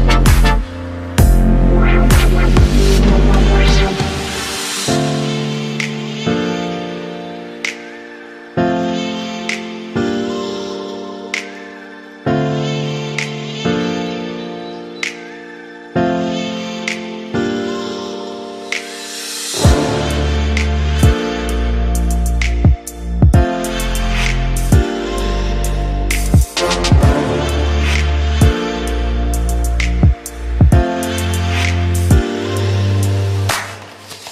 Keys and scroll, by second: 1.1 ctrl+=, 5.5 ctrl+0, 15.4 ctrl+c, 15.8 ctrl+v.